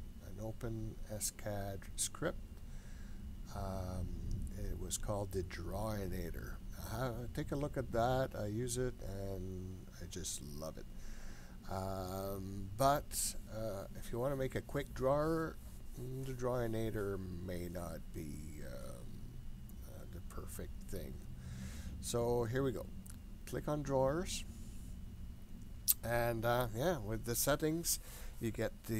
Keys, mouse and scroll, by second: 24.3 click.